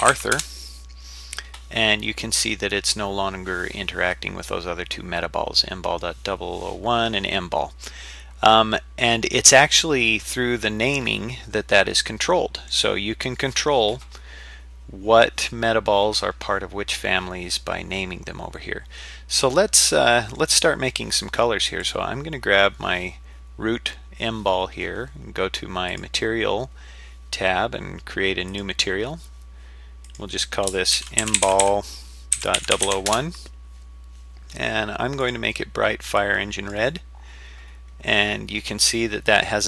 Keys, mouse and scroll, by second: 2.0-6.0 middle drag, 8.7-9.5 middle drag, 10.0-10.7 scroll down 3, 10.5-11.3 scroll up 4, 11.3 scroll down 1, 11.8-12.7 middle drag, 18.5-19.2 scroll down 1, 19.2-19.9 scroll up 1, 19.9 middle click, 21.8 click, 26.0 click, 28.5 click, 30.0-33.8 drag, 31.6 l, 32.7 0, 35.2-35.8 drag.